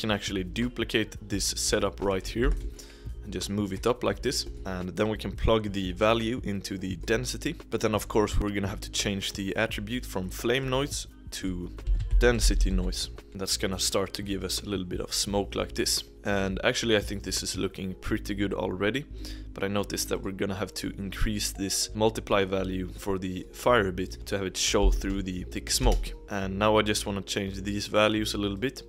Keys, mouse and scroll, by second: 0.4 click, 2.3 shift+middle click, 2.4 shift+d, 4.3 middle click, 4.6-5.0 scroll up 1, 5.0-5.3 drag, 7.6-10.1 middle drag, 11.0-13.2 drag, 16.3 click, 16.9 click, 20.0-23.1 drag, 23.1-24.2 middle drag, 24.2-27.9 drag, 28.6 click.